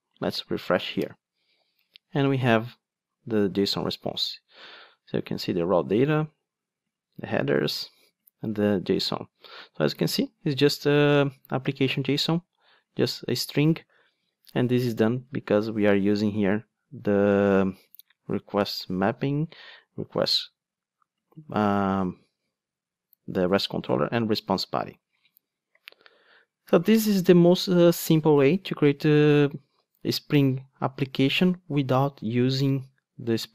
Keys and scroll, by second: 20.2 super+b.